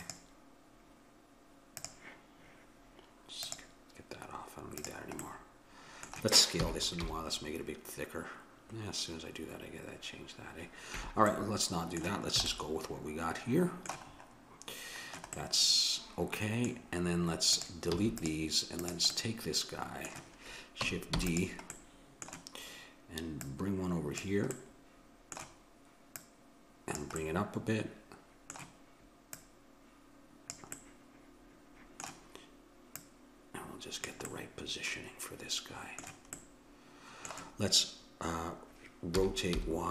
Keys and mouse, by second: 3.4-5.3 drag, 5.3-6.6 middle drag, 6.6 s, 6.8 middle click, 11.3-16.7 middle drag, 12.4 a, 17.6-20.7 drag, 17.9 x, 21.1 shift+d, 23.4-25.2 drag, 25.2-26.2 middle drag, 26.2-27.9 drag, 27.9 middle click, 29.4-31.2 drag, 30.8-31.9 middle drag, 33.0-34.8 drag, 34.8-38.8 middle drag, 39.1 r.